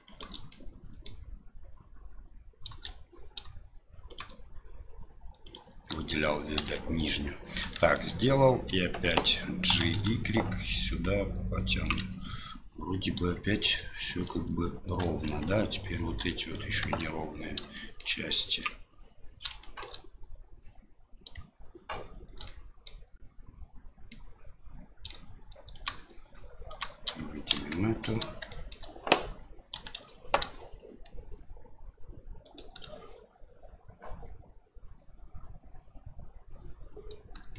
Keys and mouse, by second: 0.0 shift+right click, 0.5 middle click, 4.1 shift+right click, 5.4 shift+right click, 6.6 KP_7, 7.7 shift+middle click, 9.7 g, 13.7 shift+middle click, 15.2 Tab, 15.8 right click, 16.4 right click, 16.8 Tab, 17.7 middle click, 18.3 click, 19.6 middle click, 22.4 middle click, 24.1-25.1 middle drag, 25.7 shift+right click, 26.7 shift+right click, 27.5 KP_7, 28.5 shift+middle click, 29.7 g.